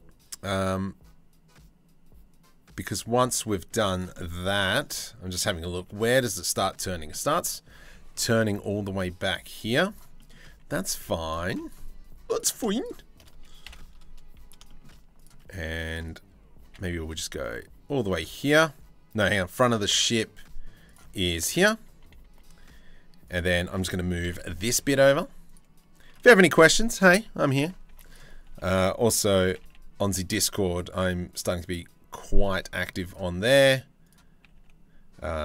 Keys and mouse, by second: 3.8 middle click, 4.5 middle click, 5.2 shift+middle click, 6.7 middle click, 8.3 middle click, 9.2 z, 9.8 click, 10.6 z, 11.1 1, 13.2 KP_7, 14.3 shift+middle click, 14.7 alt+click, 16.2 g, 21.8 2, 23.7 g, 26.5 g, 27.5 1, 27.7 click, 29.0 g, 31.8 g, 34.0 g.